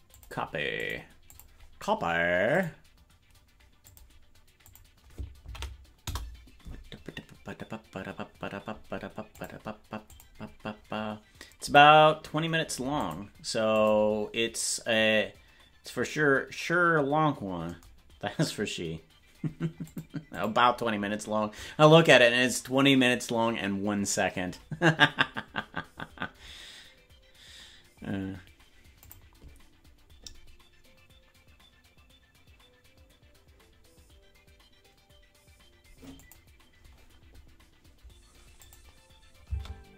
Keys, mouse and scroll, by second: 39.5 space.